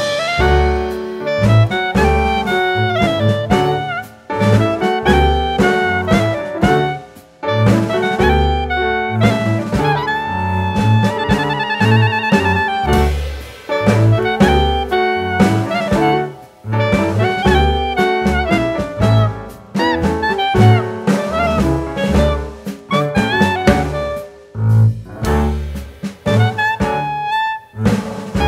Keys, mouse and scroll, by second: 2.2 click, 2.6-2.9 scroll down 3, 2.9 scroll up 1, 4.4 scroll down 1, 5.4 scroll down 1, 5.7 middle click, 6.9-7.2 scroll down 2, 7.7 click, 8.2 click, 8.8 shift+middle click, 9.2-9.7 scroll up 1, 9.7 click, 10.6 click, 13.5 click, 14.5 alt+z, 15.0 click, 15.3-16.6 scroll down 1, 16.9 click, 17.5 scroll up 1, 18.2 click, 18.8 click, 22.0 shift+a, 24.7 click, 26.2-27.8 scroll up 1, 28.3 click.